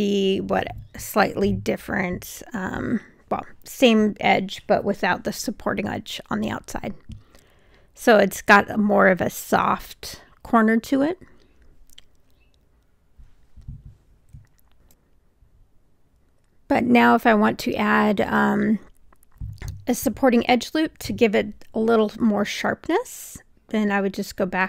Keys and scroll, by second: 3.3 3.